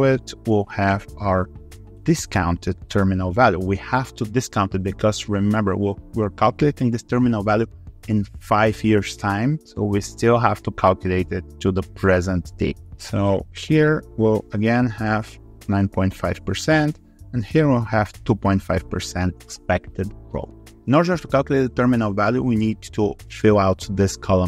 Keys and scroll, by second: 0.0 ctrl+c, 0.4 ctrl+v.